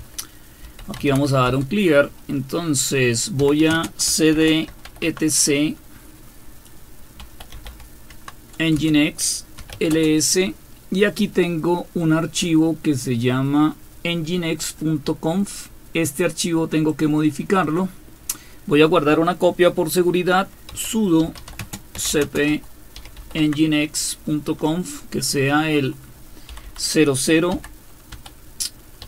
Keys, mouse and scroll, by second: 0.0-1.6 typing, 3.2-5.2 typing, 7.0-10.1 typing, 14.8-16.9 drag, 17.6 click, 20.7-23.7 typing, 26.5-29.0 typing.